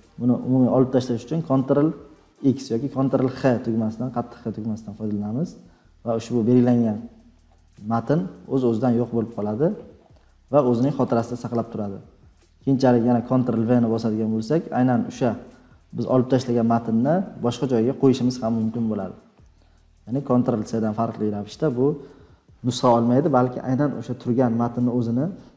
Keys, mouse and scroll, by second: 2.4 ctrl+x, 4.0 scroll, 4.7 scroll, 5.6 scroll, 8.9 scroll, 9.0 scroll up 5, 9.4-10.1 scroll down 9, 11.1 click, 12.4 Tab, 14.0 ctrl+v, 16.5 scroll down 3.